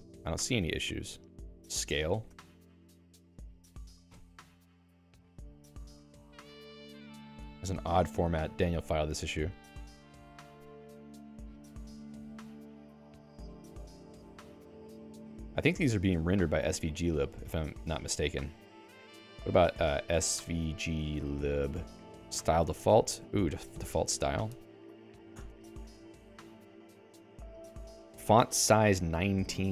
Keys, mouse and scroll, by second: 18.8 Escape, 20.2-21.9 typing, 23.2 Down, 25.4 Return, 26.2 Down.